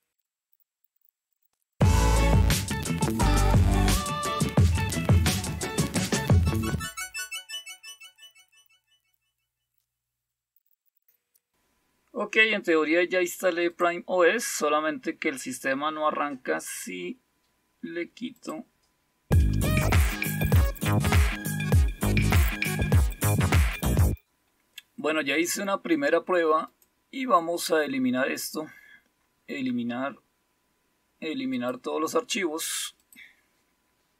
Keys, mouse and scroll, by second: 0.0 click, 0.5 click, 1.6 click, 2.9 Return, 3.2 Return, 3.4 Right, 3.6 Return, 5.1 click, 5.2 shift+l, 5.4 click, 5.9 click, 6.7-8.1 typing, 8.0 Return, 8.3 Down, 9.7 click, 11.0 click, 13.7 click, 18.3 click, 19.5 click, 19.7 click, 20.3 click, 21.2 Down, 21.4 Escape, 21.8 space, 22.1 click, 22.2 click, 23.3 click, 23.7 click, 26.7 right click, 29.2 click, 31.5 click, 33.0 click.